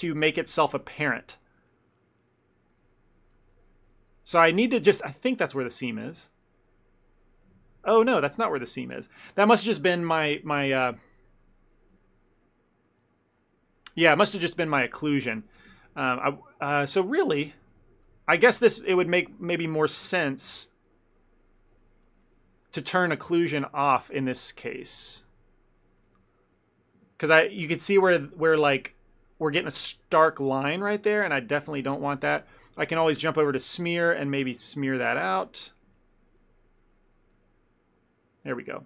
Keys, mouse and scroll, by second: 0.5 ctrl+z, 0.7 ctrl+z, 1.2 ctrl+z, 1.4 ctrl+z, 1.7 ctrl+middle click, 2.0 ctrl+middle click, 2.3 ctrl+middle click, 2.8 ctrl+click, 3.5 ctrl+z, 3.7 ctrl+z, 4.4 middle click, 5.0 Tab, 5.7 middle click, 6.0 Tab, 7.1 click, 8.7 click, 9.2 ctrl+middle click, 9.5 middle click, 11.8 middle click, 13.1 middle click, 13.1 click, 14.8 ctrl+middle click, 15.0 ctrl+middle click, 15.1 middle click, 15.6 f, 15.8 ctrl+middle click, 16.8 ctrl+middle click, 17.0 middle click, 17.7 ctrl+z, 17.9 ctrl+z, 18.3 ctrl+z, 20.1 Tab, 20.6 Tab, 21.4 click, 23.2 middle click, 23.7 middle click, 24.4 middle click, 24.7 click, 26.4 middle click, 26.6 ctrl+middle click, 26.7 ctrl+middle click, 26.9 middle click, 27.1 ctrl+middle click, 27.4 ctrl+middle click, 27.7 middle click, 28.1 middle click, 28.3 ctrl+middle click, 28.7 f, 29.9 ctrl+middle click, 30.2 ctrl+middle click, 30.7 f, 31.1 click, 31.3 click, 31.9 ctrl+middle click, 33.1 click, 33.6 f, 34.1 click, 35.3 click, 36.0 ctrl+middle click, 36.5 click, 37.5 click, 38.3 click.